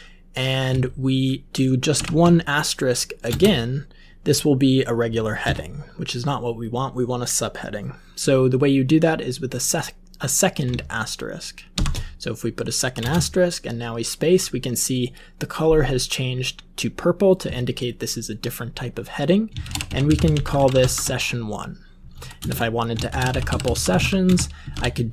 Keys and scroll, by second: 1.9 typing, 3.2 space, 5.3 BackSpace, 11.7 *, 12.9 space, 19.3-21.4 typing, 22.3 alt+Return, 22.8-25.1 typing.